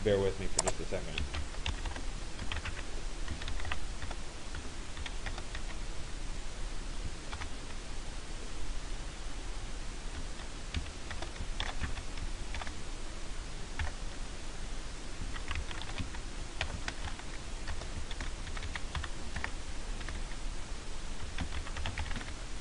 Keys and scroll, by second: 2.0 Return, 2.4 s, 4.1 BackSpace, 10.7 BackSpace, 17.2 BackSpace.